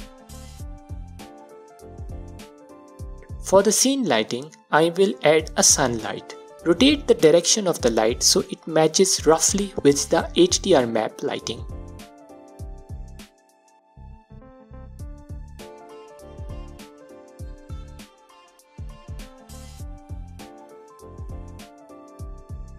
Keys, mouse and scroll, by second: 0.3-0.8 scroll down 2, 1.1-4.9 middle drag, 3.9 shift+a, 5.9 middle click, 7.8-12.8 drag, 15.1-15.7 drag, 16.1-16.7 alt+drag, 17.7 click, 18.2 click, 19.2 scroll, 19.2-19.5 scroll down 2, 19.9 click, 20.1 click, 20.3 scroll, 22.2 click.